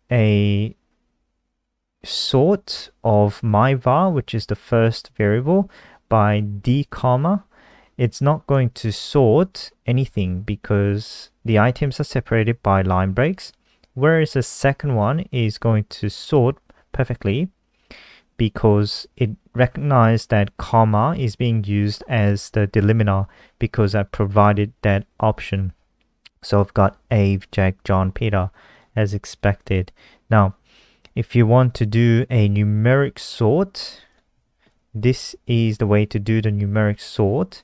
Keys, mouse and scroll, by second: 8.8 ctrl+s, 9.1 F5, 16.2 click, 29.5-30.4 scroll down 2, 30.4 click, 31.7 ctrl+c, 31.9 click, 32.5 click, 34.4 shift+Up, 34.7 ctrl+v.